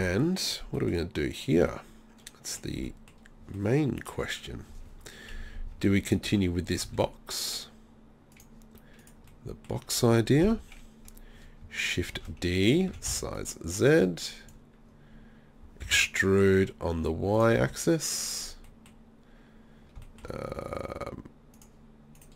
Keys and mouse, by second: 6.3 Tab, 6.9 z, 9.3 middle click, 10.5 KP_3, 12.2 shift+d, 12.7 click, 12.9 s, 14.0 click, 15.9 e, 17.4-19.4 drag, 17.6 z, 21.6 right click.